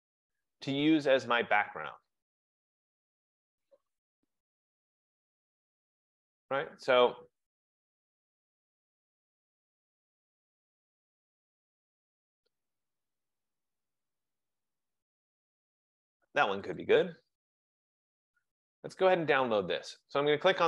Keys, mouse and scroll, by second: 0.9-1.7 scroll, 1.7 scroll, 2.6-2.9 scroll, 3.1 middle click, 3.3 middle click, 3.7 middle click, 3.9 middle click, 4.4 middle click, 4.7 middle click, 4.9 middle click, 5.0 middle click, 5.1 middle click, 5.5 middle click, 5.7 middle click, 6.0 middle click, 6.2 middle click, 6.4 middle click, 6.7 middle click, 6.7-8.7 scroll, 8.7-9.4 scroll, 9.4-10.9 scroll, 11.6 middle click, 11.7 middle click, 12.4 middle click, 12.6 middle click, 12.8 middle click, 13.3-14.5 scroll down 12, 14.5-14.9 scroll down 1, 16.8 click, 16.8 scroll up 1.